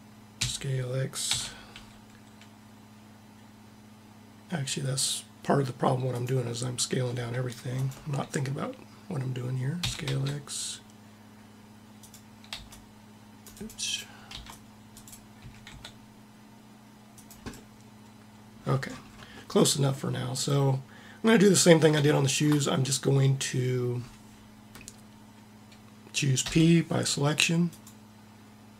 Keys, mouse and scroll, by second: 0.0 s, 7.5-9.5 drag, 9.5 s, 12.2 c, 13.5 click, 13.9 c, 15.1 s, 26.0 p.